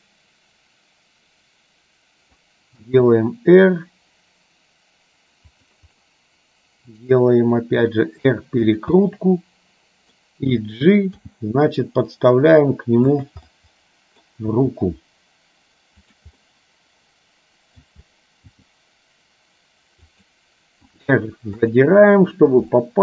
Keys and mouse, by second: 3.0 r, 6.0-7.6 middle drag, 7.9 r, 9.1-10.2 middle drag, 11.4 g, 13.6 middle click, 14.6 g, 16.6-17.9 middle drag, 18.6 g, 21.0 r, 22.9 shift+middle click.